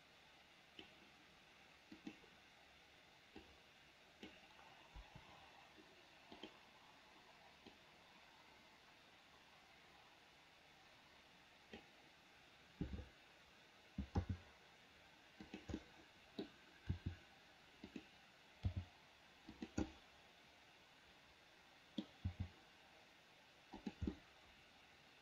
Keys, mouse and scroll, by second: 2.1 click, 3.6 click, 5.2 Delete, 6.6 click, 7.9-12.1 drag, 14.4 g, 16.0 scroll up 1, 16.2 middle click, 16.7-17.1 scroll down 1, 17.1 r, 18.9 g, 20.0-22.3 middle drag, 22.5 g, 24.3-25.2 middle drag.